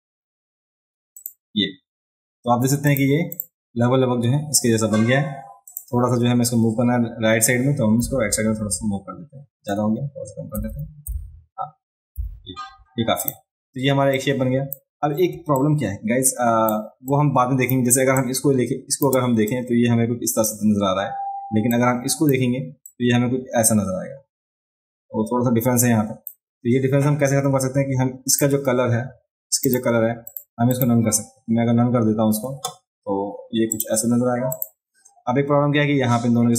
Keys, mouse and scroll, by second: 1.2 click, 2.9 click, 3.3 click, 5.7 click, 13.2 click, 14.2 click, 15.3 space, 15.6-16.7 drag, 17.1 click, 18.2 click, 19.5 click, 21.7 click, 22.8-26.3 drag, 28.3 click, 29.6 click, 30.3 click, 30.7 click, 33.7 click, 34.5 click.